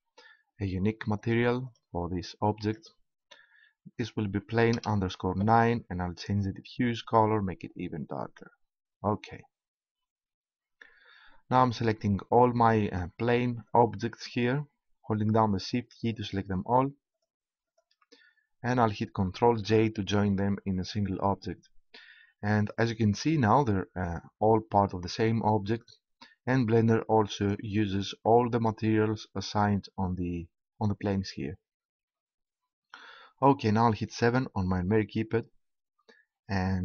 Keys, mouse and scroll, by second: 6.3-7.9 drag, 7.9 right click, 13.7-19.4 right drag, 19.5 ctrl+j, 27.2-29.0 drag, 34.1 KP_7, 35.8 KP_Decimal.